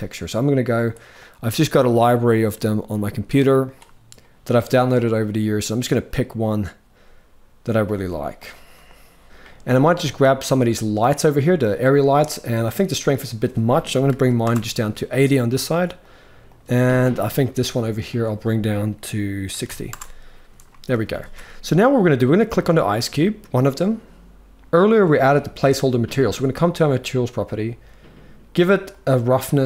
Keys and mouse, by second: 0.4 click, 9.7 click, 12.2 click, 12.9-14.1 drag, 15.7 click, 17.7-19.6 drag, 20.7 ctrl+s, 20.9 ctrl+s, 22.2 click, 24.5 click, 28.5-29.6 drag.